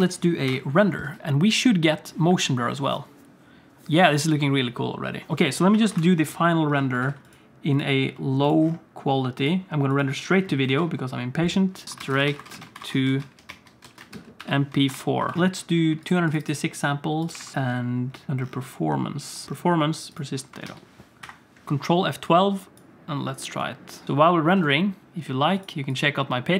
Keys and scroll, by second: 0.1 ctrl+s, 1.8 alt+a, 1.8 ctrl+s, 1.8 F12, 1.8 z, 5.3 ctrl+s, 7.1 ctrl+s, 10.9 ctrl+s, 20.8 ctrl+s, 21.3 ctrl+F12.